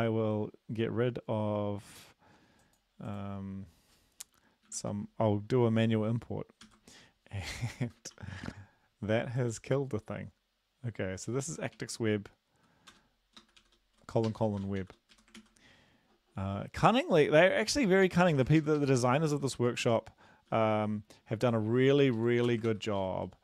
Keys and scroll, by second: 4.7 shift+Home, 6.7 ctrl+x, 7.9 Delete, 8.1 ctrl+s, 11.8 typing, 12.9 Return, 13.4-14.8 typing, 15.1 Right, 15.4 ctrl+s, 17.4 Right, 17.7 Right, 17.9 Right, 18.1 Right, 18.3 Left, 19.0 ctrl+shift+Left, 19.3 ctrl+shift+Left, 20.0 ctrl+x, 20.5 ctrl+s, 22.2 Left, 22.5 Return, 22.7 ctrl+v, 23.0 typing.